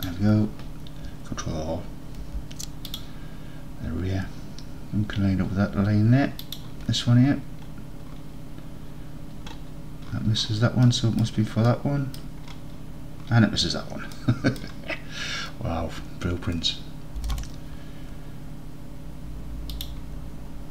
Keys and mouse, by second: 0.0 shift+click, 2.3 ctrl+r, 6.5 shift+click, 11.3 middle click, 11.7 middle click, 14.3 middle click, 17.3 g, 18.2 shift+g, 19.8 shift+click.